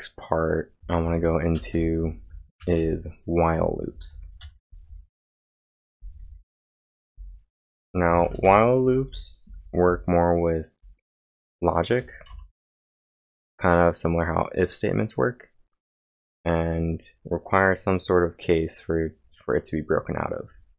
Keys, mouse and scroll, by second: 0.8 typing, 3.7-5.7 typing, 5.8 ctrl+j, 7.7-10.8 typing, 12.3 Return, 14.4 typing.